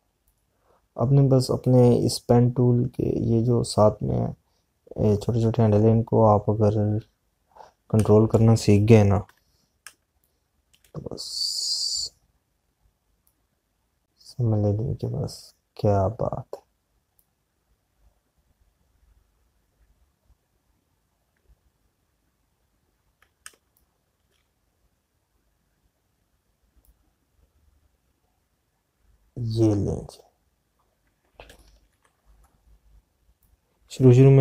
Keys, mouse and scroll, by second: 0.9 p, 1.4 click, 8.9 space, 10.2 /, 11.3 space, 14.3 click, 24.3 space, 24.8 click, 24.9 space, 29.2 click.